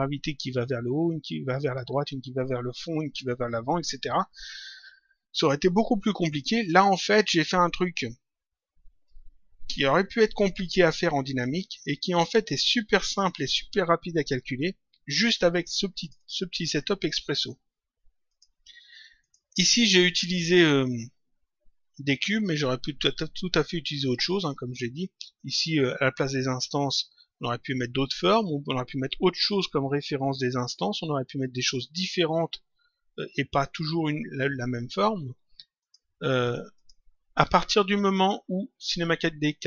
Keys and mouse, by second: 9.0 click, 16.0 click, 18.3 click, 25.3 click, 35.7 click.